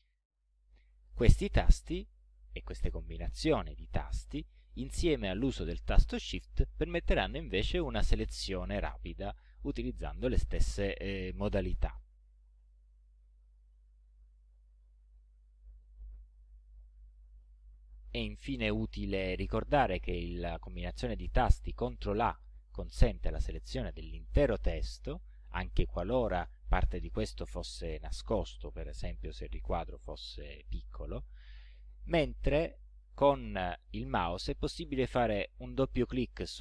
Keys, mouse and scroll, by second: 2.2 Up, 5.4 shift+Right, 6.6 ctrl+shift+Right, 13.0 ctrl+Left, 15.1 ctrl+Up, 16.3 ctrl+Down, 19.7 Left, 20.3 Up, 20.7 Left, 22.1 ctrl+a, 35.0 click, 35.8 click.